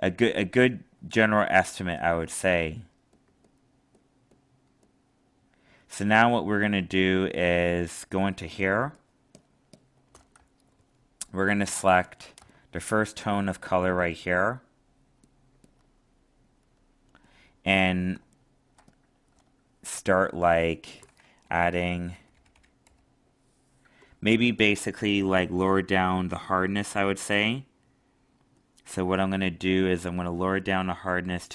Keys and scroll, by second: 18.1 alt+space.